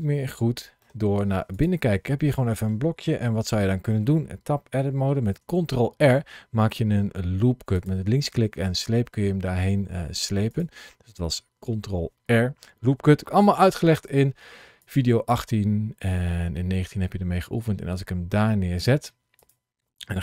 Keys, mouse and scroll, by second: 1.4 click, 2.0 middle click, 3.2 Tab, 5.4 ctrl+r, 10.4 click, 11.5 ctrl+r, 15.5 ctrl+r, 19.2 click.